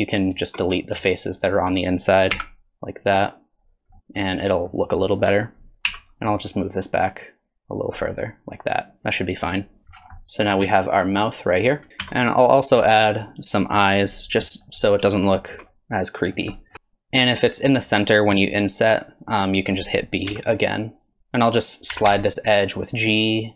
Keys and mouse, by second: 1.1 shift+click, 2.3 x, 4.0 middle click, 4.4 middle click, 5.1 middle click, 5.9 3, 6.3 middle click, 7.2 click, 8.1-9.5 middle drag, 9.8 Tab, 10.2-11.7 middle drag, 12.0 Tab, 12.6 shift+click, 13.1 click, 14.6 click, 15.4 shift+middle click, 15.7 middle click, 16.6 shift+click, 16.7 i, 21.2 g, 21.9 g.